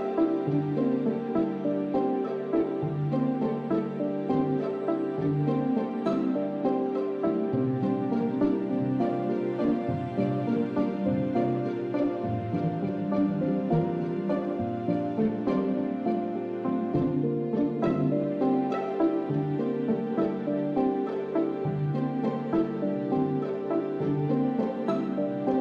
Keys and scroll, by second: 15.5 alt+Tab.